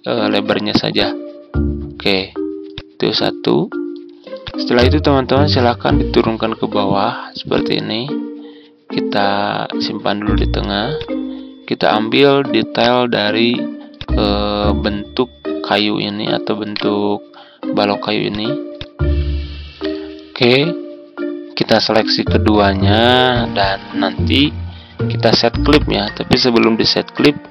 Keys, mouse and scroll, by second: 16.6 right click, 18.2-24.1 drag, 24.2-26.2 scroll up 1, 26.2 click.